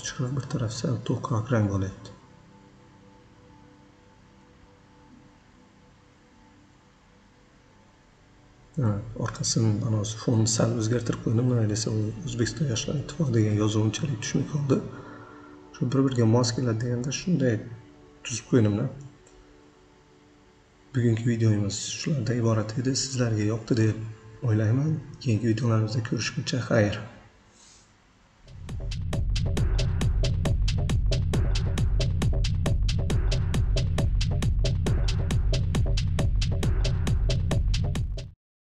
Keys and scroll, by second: 20.9 Up.